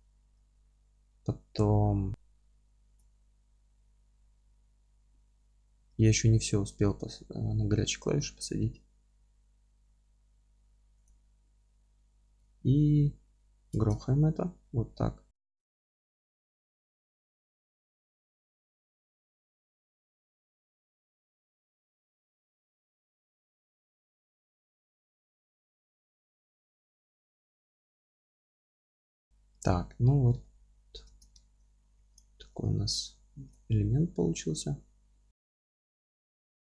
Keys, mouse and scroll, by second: 0.3-11.0 middle drag, 2.1 z, 11.0-14.0 drag, 13.1 ctrl+x, 14.0-16.5 alt+middle drag, 16.5 click, 16.9-18.9 alt+middle drag, 18.9-26.9 drag, 21.8 KP_Add, 21.9 KP_Subtract, 22.1 KP_Add, 22.2 KP_Subtract, 22.6-25.0 scroll up 1, 26.9-28.8 middle drag, 27.0 KP_Add, 28.1 ctrl+x, 28.5 Tab, 28.8 scroll down 2, 28.9 Tab, 28.9 middle drag, 29.0-29.6 scroll up 3, 29.1 alt+middle drag, 29.6 Tab, 29.6-30.4 middle drag, 31.1 Tab, 31.4 alt+middle click, 31.6 scroll up 1, 32.0 3, 32.1 click, 32.4 middle click, 33.5-34.2 scroll down 1, 34.2 1, 35.2-35.7 scroll up 1.